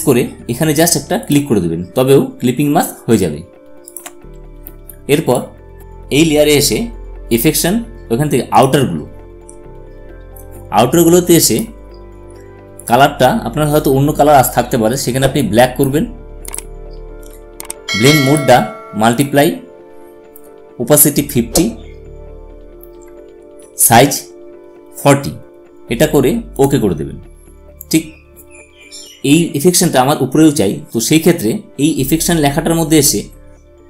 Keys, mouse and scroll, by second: 1.0 alt+click, 3.6 alt+click, 7.2 click, 10.7-12.5 drag, 15.1 click, 16.2 typing, 26.2 click, 26.2 typing, 28.5 typing.